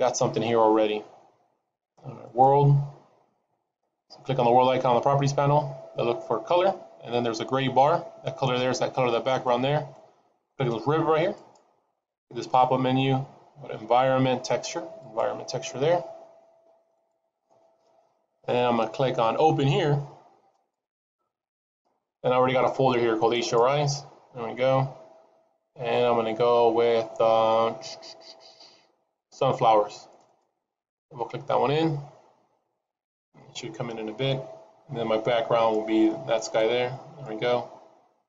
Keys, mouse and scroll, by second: 2.2 click, 11.2 click, 20.4 click, 35.6 middle click, 36.8-38.2 scroll up 2, 37.2 middle click.